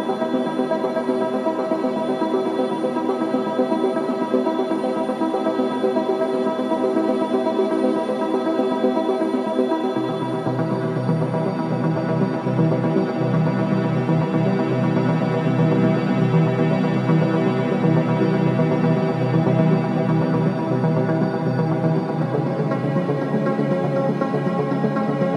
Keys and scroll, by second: 6.7 x, 11.0 space.